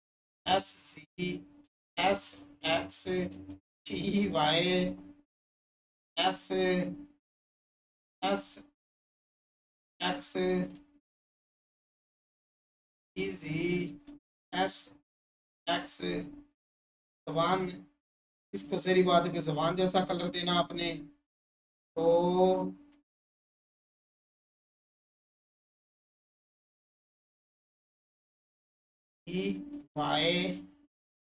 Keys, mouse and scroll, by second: 6.9-8.8 scroll up 1, 9.6 click, 10.8 1, 13.5 click, 16.1-18.9 alt+drag, 22.0-31.3 drag.